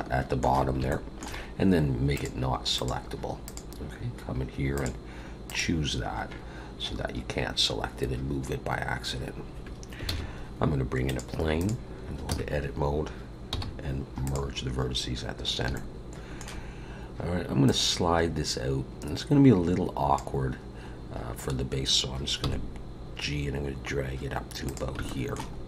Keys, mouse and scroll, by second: 0.9 shift+middle click, 2.1 click, 2.7 click, 3.4 click, 8.7-9.1 scroll up 1, 9.1-10.0 scroll down 2, 10.0 shift+a, 12.3 Tab, 13.5 m, 14.9-15.4 scroll up 2, 15.7 shift+middle click, 17.6 click, 20.9-22.4 scroll up 1, 22.4 g, 25.0 shift+middle click, 25.5 scroll up 1.